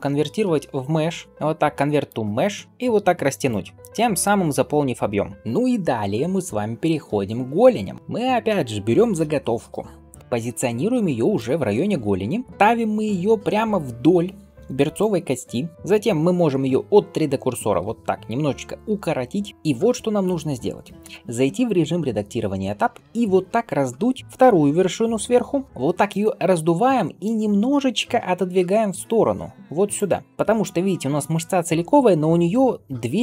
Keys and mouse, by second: 2.7 g, 5.3-12.5 middle drag, 10.2 shift+d, 12.5-15.7 right drag, 14.8 click, 14.8 middle click, 15.7-23.6 middle drag, 18.7 s, 21.6 Tab, 23.8 alt+s, 24.6 ., 28.4 g, 30.3-33.2 middle drag.